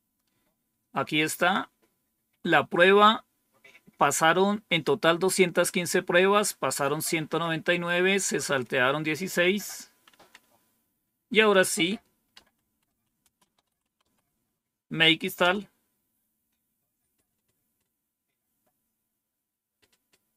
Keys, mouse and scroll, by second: 1.3 click, 8.9 Up, 10.0 Down, 12.0-15.3 typing.